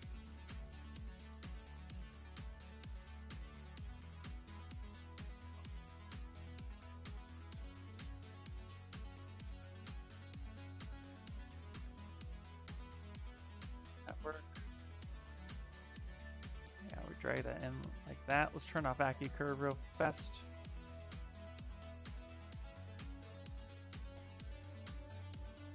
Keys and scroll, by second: 0.6 s, 3.2 s, 11.5 s, 17.8 ctrl+z.